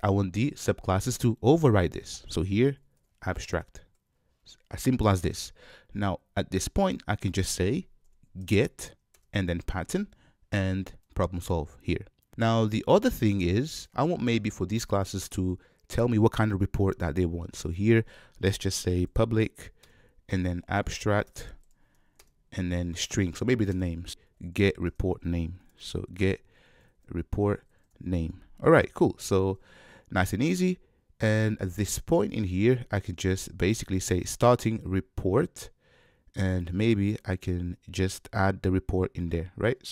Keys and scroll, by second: 3.6 Return, 19.8 Return, 24.3 alt+BackSpace, 24.5 super+z, 24.9 alt+BackSpace.